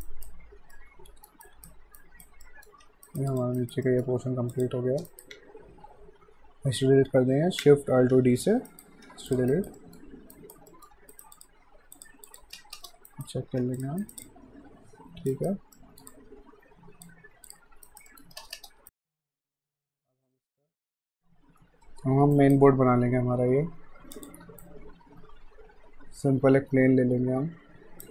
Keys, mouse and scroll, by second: 0.0 alt+right click, 0.7 alt+middle click, 1.4 alt+right click, 2.4 alt+middle click, 2.8 q, 3.1 right click, 3.3 click, 3.6 alt+right click, 3.8 alt+middle click, 4.5 click, 5.1 alt+right click, 8.1 alt+shift+d, 8.7 right click, 9.0 q, 9.3 click, 9.8 middle click, 10.3 right click, 10.7 alt+middle click, 10.9 q, 11.1 right click, 11.3 click, 12.6 space, 13.1 alt+right click, 13.6 alt+q, 13.8 click, 14.0 alt+right click, 14.3 alt+click, 15.3 alt+right click, 15.7 alt+middle click, 16.1 alt+click, 17.9 alt+right click, 18.1 alt+middle click, 18.4 space, 18.9 right click, 19.2 middle click, 19.6 right click, 19.9 middle click, 20.3 click, 20.7 alt+middle click, 22.4 alt+right click, 24.1 click, 24.6 shift+right click.